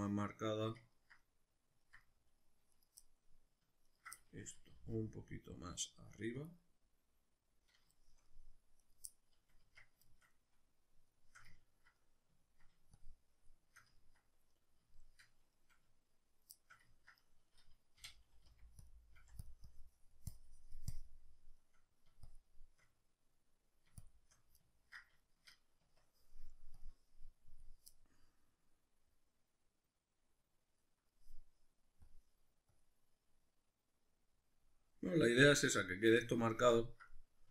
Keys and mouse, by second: 2.7 right click, 3.0-3.9 middle drag, 3.9 ctrl+right click, 4.2-6.5 middle drag, 4.8 g, 6.5 click, 6.6-8.8 middle drag, 8.8 right click, 9.1-13.0 middle drag, 9.6 Tab, 13.0-14.0 shift+drag, 14.0-18.9 ctrl+middle drag, 18.5 f, 18.9 click, 19.2 f, 19.7-21.6 drag, 21.6 middle click, 22.3 shift+click, 22.8-24.0 middle drag, 24.0 shift+click, 24.7-25.8 ctrl+middle drag, 25.8 Tab, 26.8-27.9 drag, 27.9-32.1 middle drag, 32.1 click, 32.7 click, 33.3-37.5 middle drag.